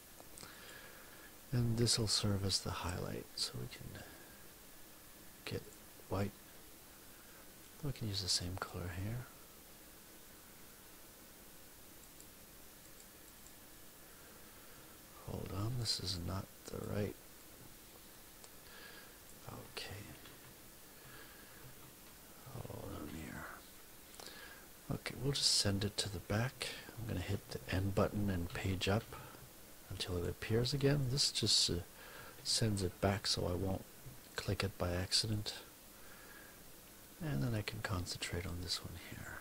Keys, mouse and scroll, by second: 0.4 click, 5.6 click, 12.0 click, 12.8 click, 15.6 F1, 16.6 click, 17.3-19.4 drag, 20.0 ctrl+z, 21.5 ctrl+z, 22.4 ctrl+z, 27.2 End, 28.4 Page_Up, 30.0 click, 30.9 click, 32.3 End, 33.0 Page_Up, 34.2 click, 35.2 click.